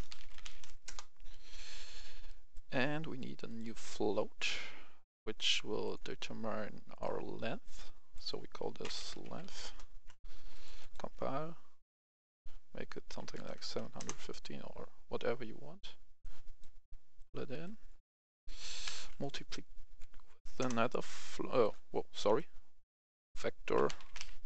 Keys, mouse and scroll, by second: 0.0-0.4 typing, 0.8 Return, 1.5 right click, 3.4-8.5 drag, 8.8-9.4 typing, 9.5 Return, 10.4 click, 13.0 KP_7, 13.2 KP_5, 13.4 KP_0, 13.9 Return, 16.1 click, 19.8 Up, 20.2 Up, 20.5 Return, 21.5 click, 22.2 Delete, 23.1 click, 23.8-24.4 typing.